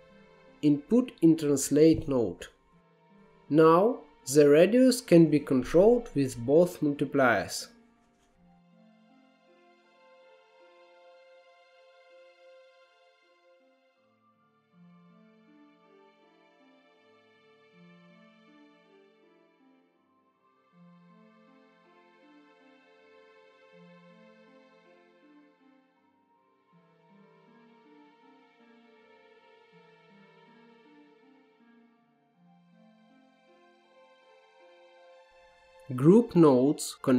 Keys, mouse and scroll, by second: 2.7-3.9 middle drag, 3.9-7.8 drag, 7.8 scroll up 1, 8.0 shift+middle click, 8.2 click, 8.5 shift+a, 10.8-12.7 drag, 12.7-13.1 scroll down 1, 13.1-13.6 scroll up 1, 13.6-15.1 drag, 15.4-16.1 scroll down 2, 16.1 scroll up 2, 16.5 click, 17.1 scroll down 1, 17.2 middle click, 17.4-17.8 scroll up 1, 17.8 click, 18.2 Tab, 18.4 s, 19.5 scroll up 1, 19.7 shift+middle click, 19.9 s, 20.3 scroll down 1, 21.1 Tab, 21.4 click, 22.0-23.0 drag, 23.0 scroll down 2, 23.2 scroll up 1, 23.7 Tab, 24.1 s, 24.7 scroll down 1, 24.9 middle click, 25.4 Tab, 26.0 g, 26.7 middle drag, 26.9 scroll up 2, 27.1 Tab, 27.3 s, 29.2-29.7 scroll up 5, 29.4 shift+middle click, 29.7 s, 30.6-31.2 scroll down 12, 30.9 middle click, 31.2 Tab, 31.5 click, 31.9 click, 32.6 shift+middle click, 32.8 scroll up 3, 33.0 shift+middle click, 33.3 click, 34.1-35.3 scroll down 21, 35.3-36.9 middle drag, 36.9-37.1 drag.